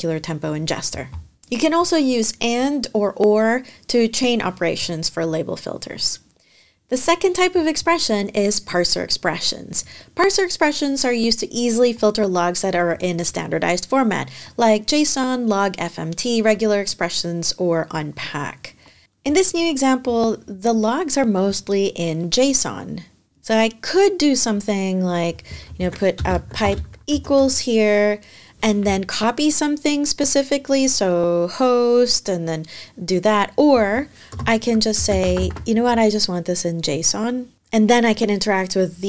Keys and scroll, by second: 25.5 super+Right, 25.9 space, 26.2 |, 26.9 =, 34.1-35.7 typing.